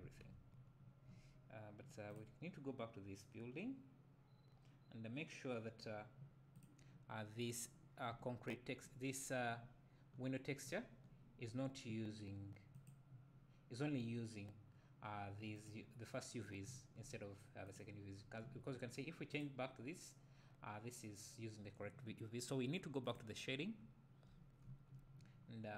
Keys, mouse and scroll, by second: 2.2 click, 6.6 click, 8.1 `, 8.3-9.2 drag, 9.2-9.6 scroll up 1, 9.6 `, 12.9 click, 15.6 click, 16.7 `, 17.6 click, 18.1-18.5 scroll down 1, 18.5 `, 19.3-20.9 drag, 23.1-23.5 drag, 23.8 `, 24.6 middle click.